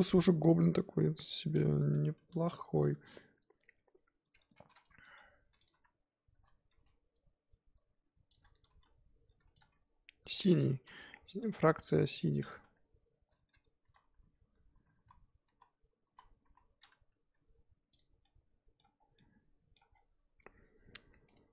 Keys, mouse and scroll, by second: 0.3 scroll down 1, 0.6-1.4 scroll up 7, 1.4 click, 1.9 Tab, 2.2 a, 2.9 Tab, 4.4 Tab, 5.1 g, 5.7 Tab, 6.3 Tab, 6.8 g, 8.6 g, 9.6 Tab, 10.3 Tab, 10.5 scroll down 1, 10.5 middle click, 11.5 g, 12.6 Tab, 13.8 ctrl+z, 14.0 ctrl+z, 14.2 ctrl+z, 14.7 ctrl+z, 15.5 ctrl+z, 16.1 ctrl+z, 17.2 Tab, 18.0 click, 18.2-18.9 middle drag, 18.9 scroll down 3, 19.1-19.9 middle drag, 19.9-21.3 scroll down 2, 21.3 click.